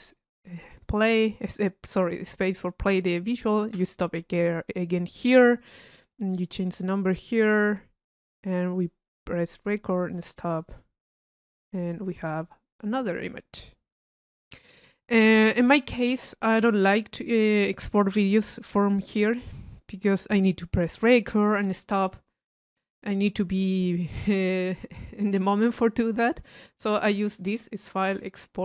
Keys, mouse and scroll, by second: 16.4 middle click, 16.9 click, 17.8 click, 22.7 click, 25.6 click, 27.8 click.